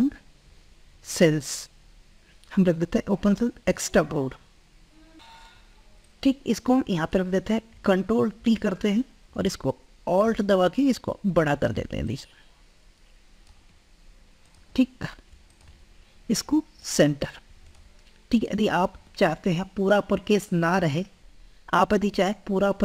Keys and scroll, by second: 8.3 ctrl+t, 9.5 ctrl+t.